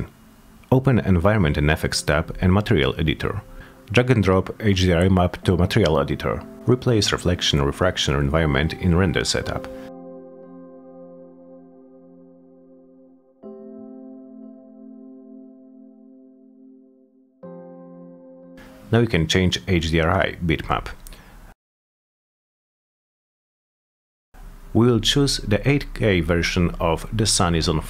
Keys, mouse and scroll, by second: 1.5 click, 3.4 click, 5.8 F10, 8.0 click, 10.0-11.9 drag, 13.0 click, 14.4 click, 15.6 click, 16.2 middle click, 16.4 middle click, 16.6 middle click, 17.1 click, 17.3 click, 18.4 click, 18.6 click, 21.0 click, 24.0 click, 26.1 click, 26.4 click.